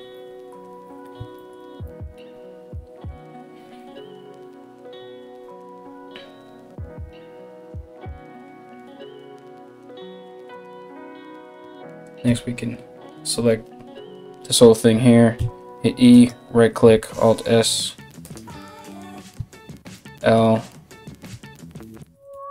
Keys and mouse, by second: 11.9 l, 16.5 e, 16.5 alt+s, 20.8 l, 20.8 h, 21.6 ctrl+z, 21.9 g.